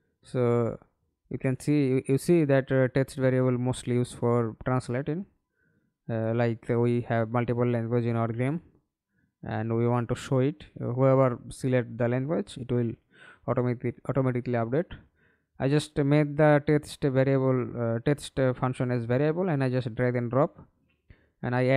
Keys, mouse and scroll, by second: 4.9-6.3 typing, 6.3 Return, 8.5 right click, 9.3 right click, 10.2-10.5 scroll up 1, 10.5 right click, 13.7-17.1 typing, 18.9 Down, 19.4 Return.